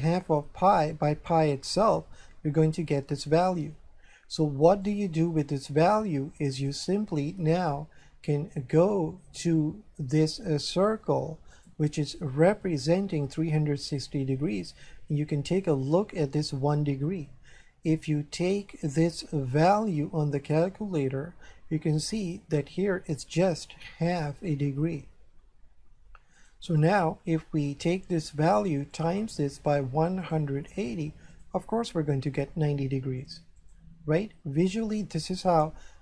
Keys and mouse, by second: 4.9 click, 6.5 click, 8.0 shift+middle click, 11.5 right click, 14.1 shift+middle click, 19.7 click, 22.2 click, 26.3 click, 29.0 click, 33.6 click.